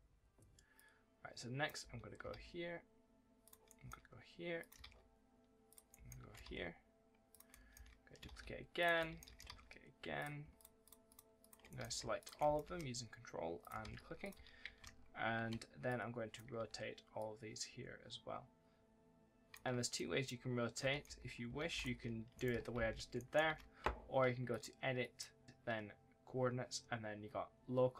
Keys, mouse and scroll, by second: 0.6 click, 1.6 d, 2.2 ctrl+d, 3.3 click, 3.5 right click, 3.7 d, 4.4 click, 4.7 ctrl+d, 5.5 click, 5.7 right click, 5.8 d, 6.3 ctrl+d, 7.1 click, 7.3 s, 8.1 ctrl+d, 8.6 click, 8.8 s, 9.3 ctrl+d, 10.0 click, 10.4 ctrl+click, 11.2 ctrl+click, 11.5 right click, 11.7 a, 12.0 ctrl+click, 12.2 ctrl+right click, 12.3 s, 13.4 click, 13.7 ctrl+d, 14.1 click, 14.2 2, 15.7 click, 17.0 click, 19.8 click, 20.0 right click, 20.4-21.6 typing, 20.8 right click, 22.2 right click, 22.6 ctrl+z, 23.0 right click, 23.8 ctrl+z, 24.3 click.